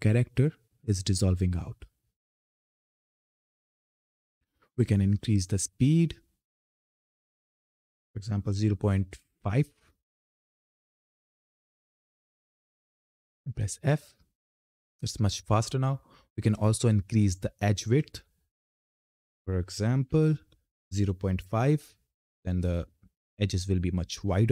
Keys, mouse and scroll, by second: 6.0 click, 10.6 click, 12.1 ctrl+F10, 13.1 f, 16.3 click, 22.3 click.